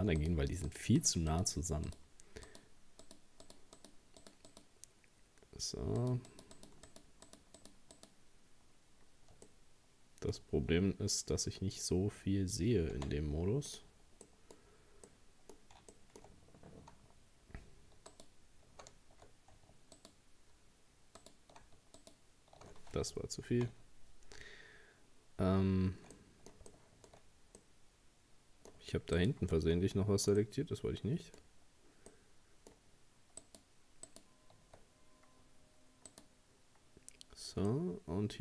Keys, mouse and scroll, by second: 0.2 right click, 0.7 shift+right click, 1.0 shift+right click, 1.3 shift+right click, 1.9 shift+right click, 2.5 shift+right click, 3.0 shift+right click, 3.4 shift+right click, 3.8 shift+right click, 4.2 shift+right click, 4.5 shift+right click, 6.0 shift+right click, 6.3 shift+right click, 6.6 shift+right click, 6.9 shift+right click, 7.3 shift+right click, 7.6 shift+right click, 8.0 shift+right click, 9.5-12.5 middle drag, 12.9 z, 14.3 middle click, 14.6-15.1 scroll up 2, 15.1-16.5 middle drag, 16.5-17.7 scroll up 1, 17.7-18.1 scroll up 1, 18.1 alt+shift+right click, 20.0 shift+right click, 21.2 shift+right click, 22.0 alt+shift+right click, 23.6 ctrl+z, 26.2-27.2 middle drag, 27.2-27.6 scroll up 1, 27.6-29.2 middle drag, 29.2 shift+right click, 29.6-30.4 scroll down 1, 30.4-31.5 middle drag, 31.5-32.1 scroll up 1, 32.1-33.4 middle drag, 33.4 shift+right click, 34.1 shift+right click, 34.9 scroll up 1, 36.1 shift+right click, 37.7-38.4 middle drag.